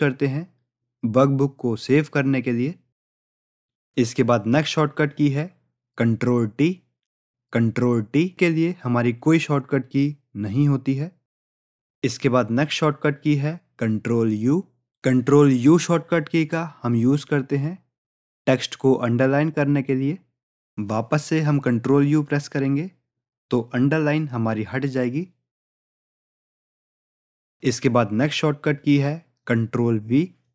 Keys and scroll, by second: 20.1 ctrl+u, 22.7 ctrl+u.